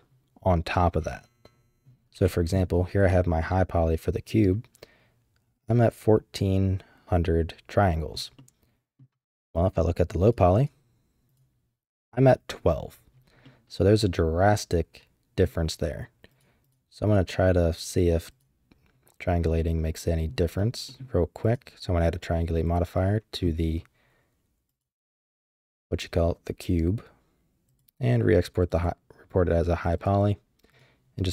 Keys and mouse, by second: 3.0 click, 3.4-4.4 middle drag, 8.3 middle click, 10.2 click, 10.5 drag, 11.2 click, 13.4-15.4 middle drag, 16.3 click, 16.6 click, 17.0 click, 18.3 click, 19.5-20.2 middle drag, 20.8 middle click, 21.4-22.7 drag, 24.7 drag, 25.3-27.9 drag.